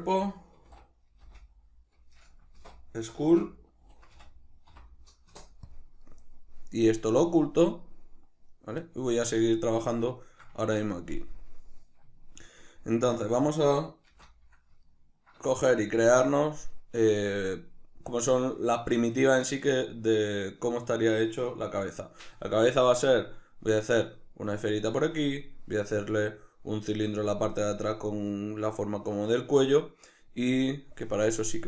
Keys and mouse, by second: 6.9 drag, 7.8 click, 10.2-11.4 shift+middle drag, 11.4 drag, 12.1-20.1 shift+middle drag, 14.1 shift+c.